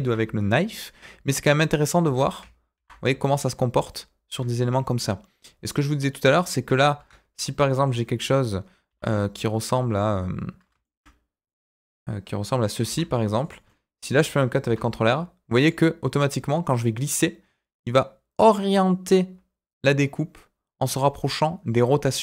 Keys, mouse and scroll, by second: 1.8 middle click, 2.0 Tab, 2.7 ctrl+r, 5.6 click, 6.2 click, 6.9 KP_1, 7.6 shift+middle click, 8.8 r, 10.8 shift+middle click, 11.4 middle click, 11.8 click, 12.8 r, 13.6 middle click, 14.6 ctrl+r.